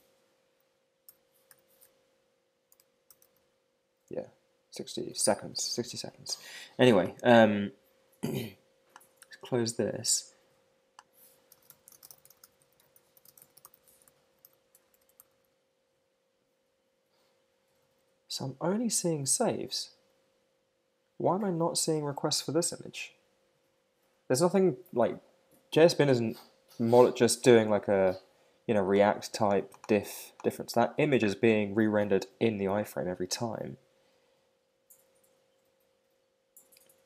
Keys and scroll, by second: 4.1 Escape.